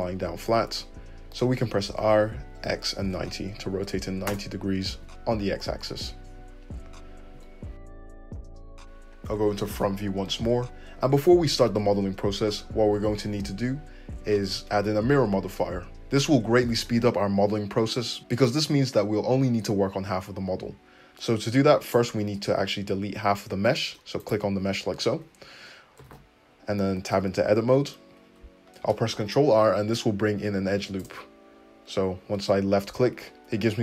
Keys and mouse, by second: 1.9 r, 2.3-21.8 middle drag, 7.3 `, 21.8 click, 22.0-24.2 middle drag, 24.2 click, 24.3-25.6 middle drag, 25.1 `, 26.0 alt+z, 26.1 `, 27.3 Tab, 28.7 ctrl+r.